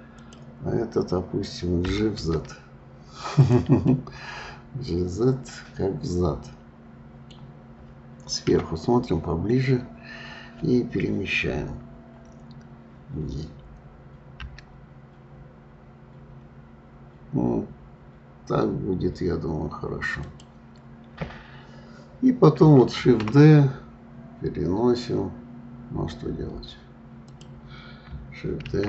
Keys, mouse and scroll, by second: 0.1 click, 1.9 g, 3.9-6.9 middle drag, 8.4 KP_7, 8.9-9.5 scroll up 4, 14.4 g, 23.0 shift+d, 28.7 shift+d.